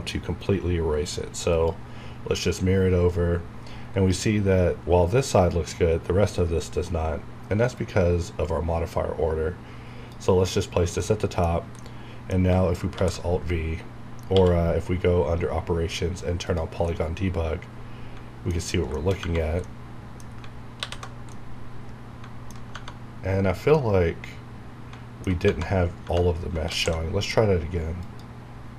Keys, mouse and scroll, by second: 1.5 click, 3.9 scroll up 1, 7.7-11.0 drag, 11.0-12.9 middle drag, 12.9 alt+v, 14.3 q, 16.8-18.9 middle drag, 19.2 Tab, 19.6 middle click, 20.7 alt+h, 21.2-22.6 middle drag, 22.6 Tab, 23.7-25.4 middle drag, 25.4 Tab, 26.6 alt+x, 28.0 click.